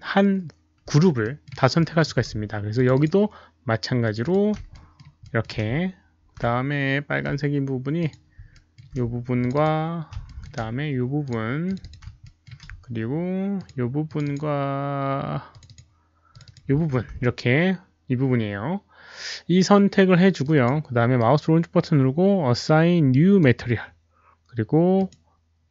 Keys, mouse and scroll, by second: 1.2 alt+middle click, 1.7 alt+middle click, 2.7 shift+click, 2.9 shift+click, 4.0 shift+click, 4.2 shift+click, 4.7 alt+middle click, 4.8 shift+click, 5.2 alt+middle click, 7.2 alt+middle click, 7.2 shift+click, 7.9 shift+click, 8.5 alt+middle click, 9.3 shift+click, 9.6 alt+middle click, 10.2 alt+middle click, 11.2 shift+click, 11.2 alt+middle click, 11.6 shift+click, 12.2 alt+middle click, 13.5 shift+click, 14.0 shift+click, 14.0 alt+middle click, 14.2 shift+click, 15.4 shift+click, 15.4 alt+middle click, 15.6 shift+click, 15.6 alt+middle click, 16.2 shift+click, 16.4 shift+click, 18.3 shift+click, 18.3 alt+middle click, 20.4 shift+click, 20.4 alt+middle click, 21.2-24.0 right drag, 21.3 shift+click, 21.3 alt+middle click, 22.6 shift+click, 22.6 alt+middle click, 24.9 click, 25.0 right click.